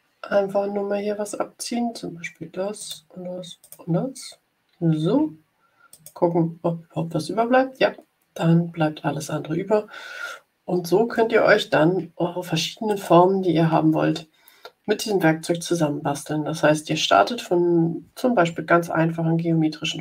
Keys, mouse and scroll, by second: 2.7 click, 3.5 click, 5.8 click, 12.8 click.